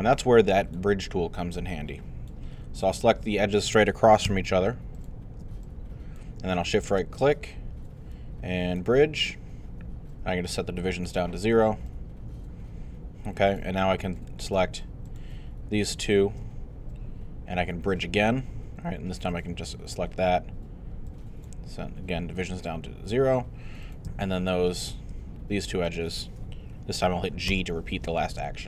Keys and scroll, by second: 27.5 g.